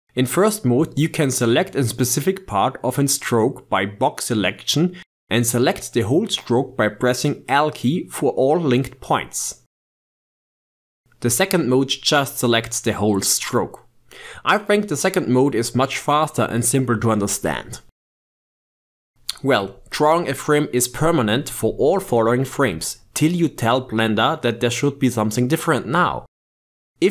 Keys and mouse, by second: 0.0 click, 1.8 click, 3.2 click, 4.5 click, 7.8 l, 9.8 g, 12.2 click, 13.6-14.5 drag, 15.5 click, 16.4 shift+click, 17.0 g, 23.6-27.1 drag.